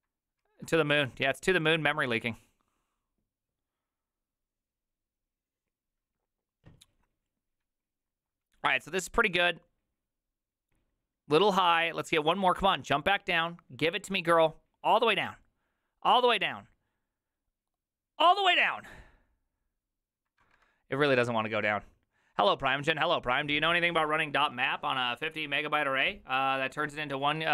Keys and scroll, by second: 0.4 alt+{.